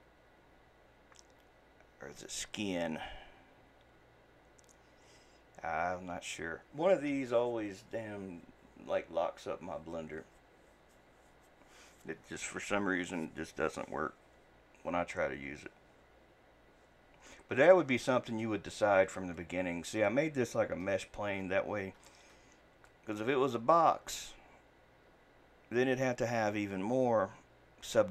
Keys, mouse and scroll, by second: 17.7 middle click, 18.6-19.4 scroll down 1, 19.4-21.4 middle drag, 21.4-22.4 scroll up 1, 22.4-22.9 scroll down 1, 22.9-24.1 shift+middle drag, 24.1-24.6 scroll up 1, 24.6-27.6 scroll down 1.